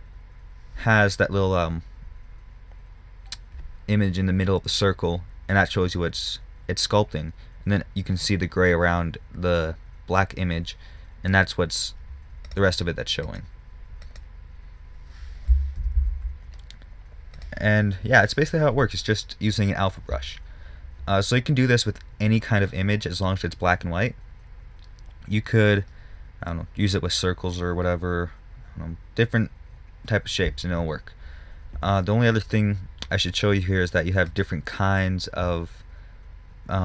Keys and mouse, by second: 13.6-16.2 drag, 16.2 ctrl+z, 16.4 ctrl+z, 17.8 click, 36.6-36.8 middle drag.